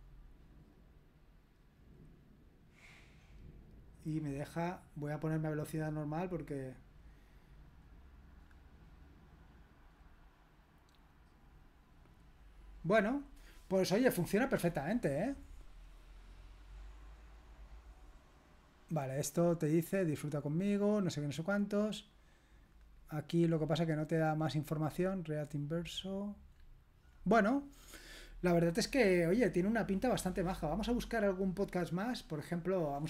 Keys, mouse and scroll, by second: 0.7 click, 1.8 click, 2.7 click, 3.9 click, 5.0 click, 6.3 click, 7.7 click, 8.4 click, 9.9 click, 11.6 click, 12.7 click, 15.4 click, 16.4 click, 17.6 click, 20.1-21.0 scroll down 3, 21.9 click, 22.7 click, 23.0 click, 23.5-24.1 scroll up 2, 24.1-24.8 scroll down 2, 24.8 click, 26.6-29.7 scroll up 1, 29.7-30.2 scroll up 1, 30.6-31.6 scroll down 1, 31.6 click, 32.7 click.